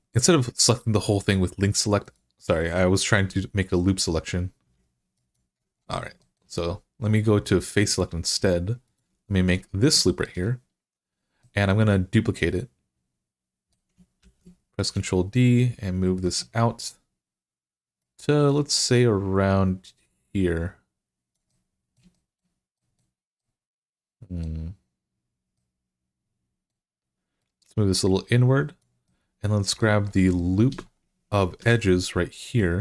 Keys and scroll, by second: 14.0 d, 31.4 2.